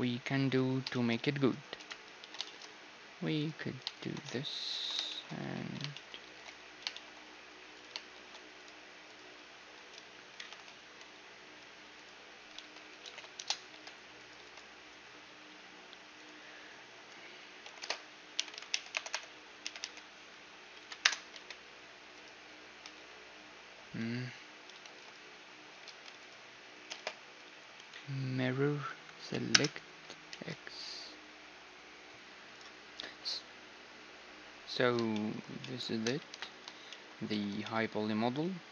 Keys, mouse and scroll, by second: 1.9 KP_1, 2.1 z, 2.6 z, 3.5 click, 3.5-5.7 right drag, 4.7 ctrl+j, 5.1 click, 5.4 z, 5.7-7.8 middle drag, 5.7 z, 6.3 shift+d, 7.8-11.3 right drag, 8.1 shift+5, 8.3 middle click, 8.3 shift+s, 10.8 x, 12.1-13.9 right drag, 12.6 r, 13.7 g, 14.6 x, 16.2-18.0 right drag, 17.8 ., 17.8 space, 19.1 BackSpace, 19.8 r, 22.7-24.9 middle drag, 24.9 shift+d, 25.8 g, 26.9 space, 29.3 Down, 30.3 x, 32.2 a, 34.8-38.7 middle drag, 35.9 KP_1.